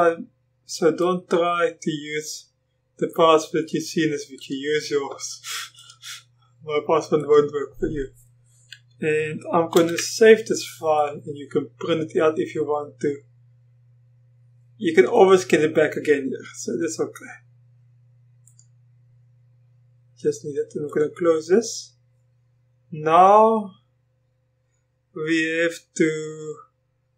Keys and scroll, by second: 9.8 ctrl+v.